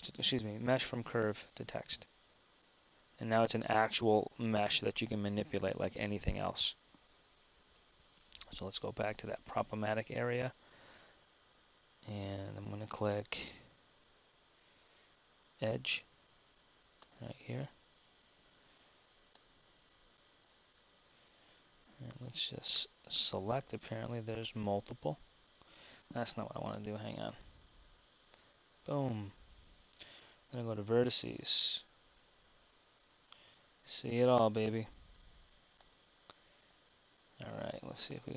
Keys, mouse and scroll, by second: 2.2 Tab, 6.0 Tab, 9.8 KP_1, 11.7 Tab, 12.3 Tab, 13.8 Tab, 18.1 KP_1, 21.1 z, 22.0 b, 26.7 a, 33.7 KP_1, 34.9 b.